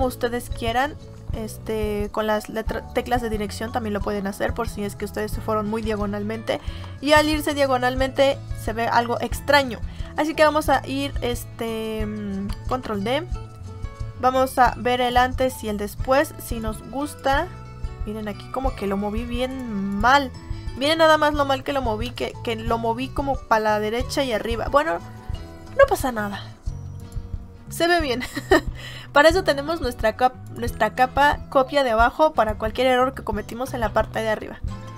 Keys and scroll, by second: 0.7 Left, 7.0 ctrl+d, 10.4 ctrl+z, 12.6 ctrl+d, 22.0 space.